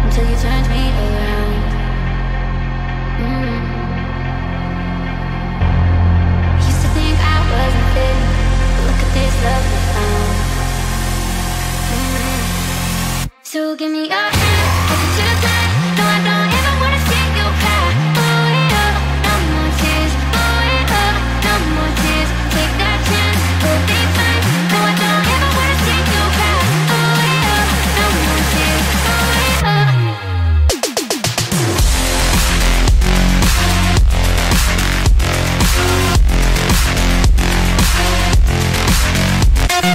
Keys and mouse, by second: 0.2 KP_7, 1.9 z, 4.5-6.9 drag, 7.6-9.3 middle drag, 9.9 click, 10.7 click, 11.9 KP_7, 13.2-16.0 drag, 16.6 middle click, 18.2 click, 19.8 KP_7, 21.5-23.3 drag, 23.8 middle click, 25.3 click, 26.4 KP_7, 28.0-29.5 drag, 30.2 middle click, 31.9 middle click, 32.7 z, 34.8-37.8 middle drag, 39.0-39.9 middle drag.